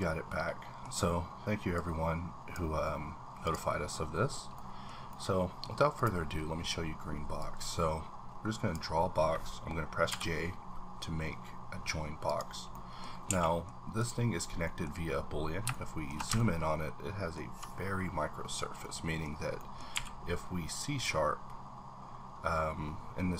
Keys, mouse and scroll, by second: 2.1-2.9 drag, 2.9-3.4 scroll down 1, 3.8-4.2 scroll up 3, 4.2-4.5 scroll down 1, 4.8-5.2 middle drag, 5.9 click, 7.4-12.3 drag, 10.1 j, 12.7 middle click, 13.1 scroll up 2, 13.3 a, 13.4 middle click, 14.0 click, 14.6 middle click, 14.8-15.6 scroll up 4, 15.7-18.2 shift+middle drag, 16.3-16.7 ctrl+scroll up 1, 17.9-18.8 scroll down 6, 18.8 middle click, 19.3 scroll up 1, 19.9 q, 20.8 click, 20.8 click.